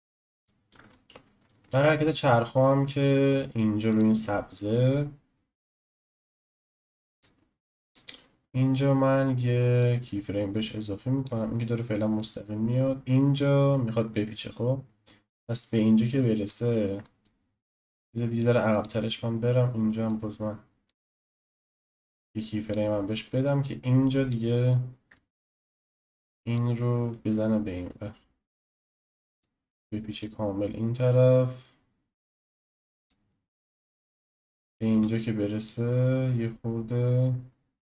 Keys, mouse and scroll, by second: 0.4-0.9 shift+middle drag, 0.9-1.5 scroll up 1, 1.5-4.0 shift+middle drag, 3.9 click, 7.2-9.8 drag, 12.2-15.3 drag, 15.7-16.7 shift+middle drag, 16.7-17.0 scroll down 1, 17.0-18.4 shift+middle drag, 18.4-20.3 drag, 23.6-25.1 drag, 25.1-26.5 shift+middle drag, 26.5 click, 30.2-33.6 drag, 33.6-35.6 shift+middle drag, 35.6 click.